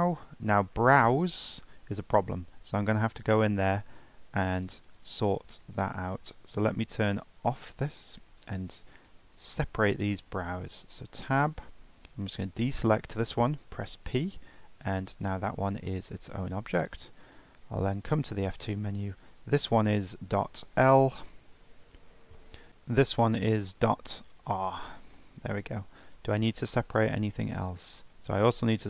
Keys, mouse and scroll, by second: 4.6-7.5 drag, 8.4 click, 8.9-9.5 scroll down 3, 9.5-10.1 shift+middle drag, 10.1-10.7 scroll up 2, 10.7 Tab, 11.2 shift+middle click, 12.2 ctrl+click, 13.5 p, 16.1 Tab, 16.8 click, 17.7 F2, 19.1 BackSpace, 19.5 BackSpace, 22.7 F2, 25.9 scroll down 4, 26.2-26.8 scroll up 2, 26.8 click, 28.1 click, 28.7 click.